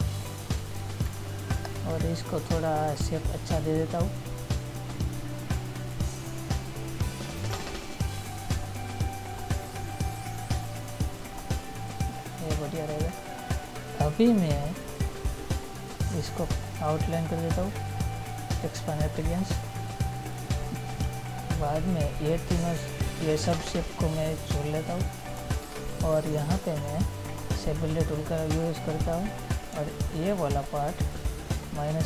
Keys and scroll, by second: 1.5 ctrl+-, 13.5 ctrl+-.